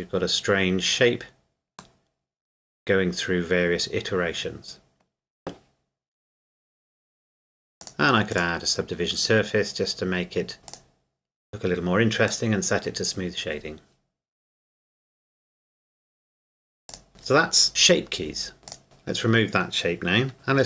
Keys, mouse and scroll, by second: 2.0 middle click, 7.8 click, 10.7 click, 16.9 click, 18.7 click, 20.3 scroll down 1.